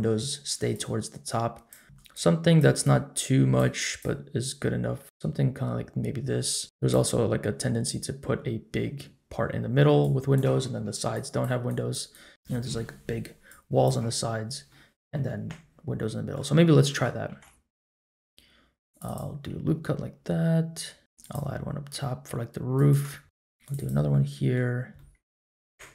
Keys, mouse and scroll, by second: 13.5 click, 14.7 middle click, 15.4 middle click, 16.9 middle click, 17.3 ctrl+r, 19.4-21.0 middle drag, 21.0 ctrl+r, 21.0 scroll up 1, 23.2 click, 23.2 3, 24.1 middle click, 24.7 scroll down 1, 24.9 middle click, 25.6 middle click.